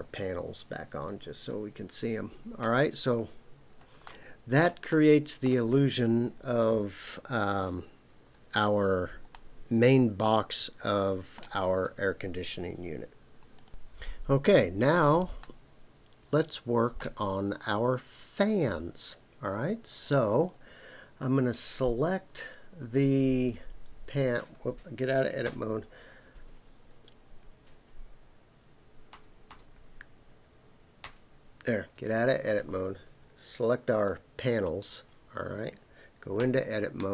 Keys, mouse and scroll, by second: 1.4 click, 2.3 scroll down 1, 2.4-3.8 scroll up 2, 4.0 shift+middle click, 4.9 middle click, 5.7-6.3 scroll down 2, 9.3-11.4 middle drag, 15.4-17.1 middle drag, 23.4 click, 25.4 Tab, 29.1 Tab, 29.5 Tab, 31.0 Tab, 33.9 click, 36.4 Tab.